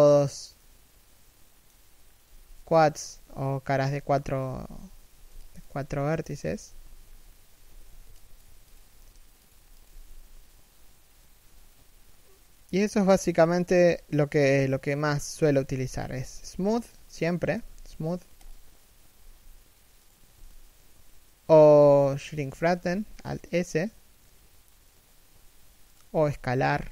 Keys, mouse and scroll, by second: 1.7-2.6 scroll down 1, 2.6 3, 2.7 1, 4.3 z, 4.7 a, 4.9 b, 7.3 z, 7.5 a, 7.7 b, 14.3 shift+middle click, 15.5 scroll up 1, 15.7 a, 16.4 alt+right click, 17.2 w, 18.8 s, 22.5 alt+s.